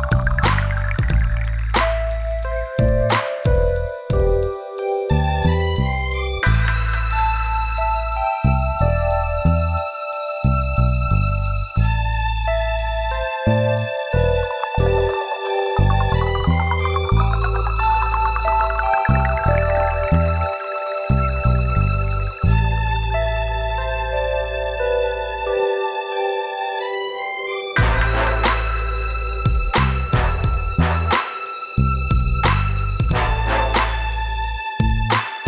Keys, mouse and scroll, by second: 0.3 click, 1.5 click, 2.1 click, 2.9 click, 3.8 click, 4.1 click, 4.7 click, 5.0 scroll down 2, 5.8 click, 5.9 scroll down 1, 8.8 click, 11.1 middle click, 11.6 scroll down 1, 12.6 click, 13.5 click, 13.6 click, 14.4 click, 15.7 click, 16.4 click, 17.0 click, 17.8 click, 18.7 click, 19.4 click, 22.8 scroll down 1, 24.6 click, 26.6 click, 27.1 click, 28.2 click, 29.5 click, 30.0 click, 31.3 click, 32.0 click, 32.2 click, 32.6 click, 33.1 click.